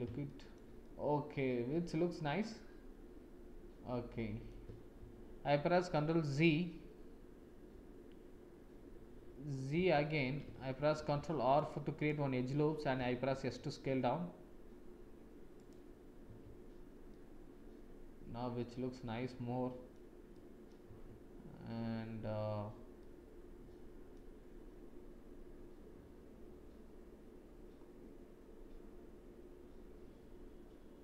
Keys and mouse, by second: 0.2 shift+click, 0.8 click, 1.2 middle click, 1.5 click, 1.6 middle click, 1.7 click, 1.8 middle click, 2.0 middle click, 2.2-4.5 middle drag, 5.0 ctrl+z, 9.7 ctrl+z, 10.9 ctrl+r, 12.9 s, 16.4 Tab, 17.1 click, 17.7-19.9 middle drag, 20.3 middle click, 20.8 Tab, 22.9-24.1 drag.